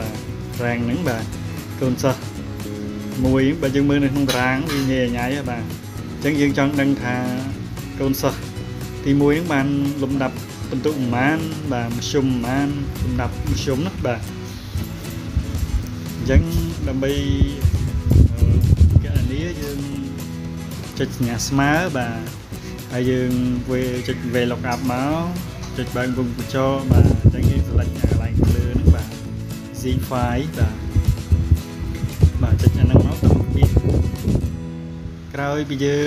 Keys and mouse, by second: 2.9-4.2 ctrl+drag, 15.5 click, 30.3 click, 34.8 click.